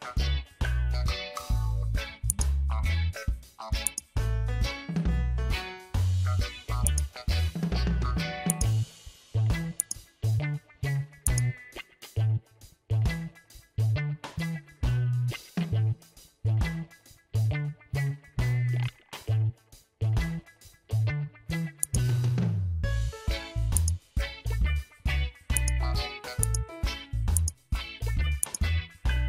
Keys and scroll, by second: 9.7 space.